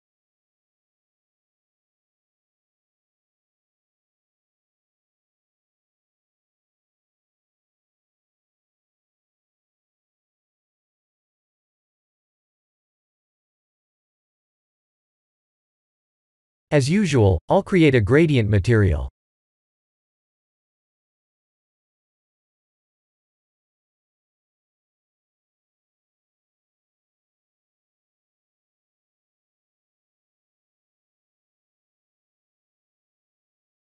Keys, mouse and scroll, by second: 4.2 click, 5.0 click, 5.4 middle click, 8.5 click, 9.0-9.5 scroll up 1, 9.5 middle click, 9.5 scroll up 1, 11.2 click, 11.2 middle click, 11.2-11.6 scroll up 2, 12.5 click, 14.6 KP_1, 15.8 shift+middle click, 15.9 shift+middle click, 17.2 shift+middle click, 19.6 shift+a, 26.0 click, 27.2 shift+middle click, 28.2 shift+a, 30.9 x, 31.2 shift+a.